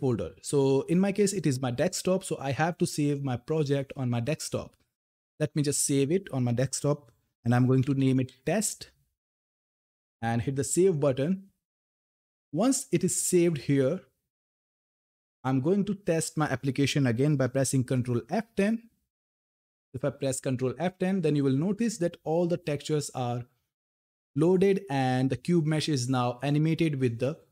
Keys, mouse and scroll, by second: 2.9 click, 5.2 click, 7.2-8.4 typing, 10.1 click, 15.2 click, 19.2 ctrl+F10.